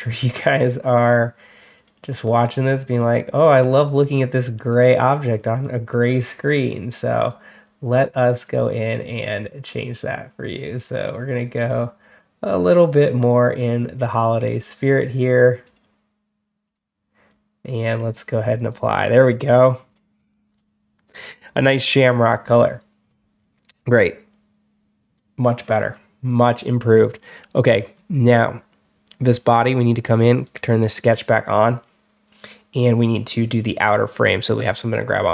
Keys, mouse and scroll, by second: 0.7 middle click, 0.7 scroll down 2, 1.6 click, 1.8 click, 2.3 click, 2.8 click, 3.2-3.8 drag, 4.6 click, 5.2 click, 5.4 click, 7.1 click, 8.3 click, 9.1 click, 9.7 click, 10.5 click, 11.0 click, 11.7-13.4 drag, 15.5 click, 16.5 click, 17.1 click, 18.4 click, 22.5 click, 25.7 click, 26.1 click, 29.2 click, 30.3 click, 34.4 click.